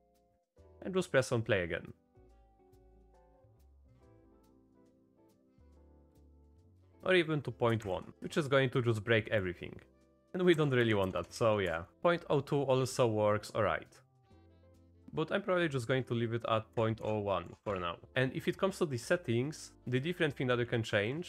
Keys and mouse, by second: 0.0 shift+BackSpace, 0.1 shift+Left, 0.3 space, 2.7 click, 5.3 click, 6.9 space, 6.9 space, 7.8 shift+Left, 8.1 space, 8.2 space, 8.6 click, 10.2-11.9 drag, 10.2 space, 10.8 Right, 11.2 BackSpace, 11.3 BackSpace, 11.9 shift+Left, 11.9 space, 15.0-17.6 drag.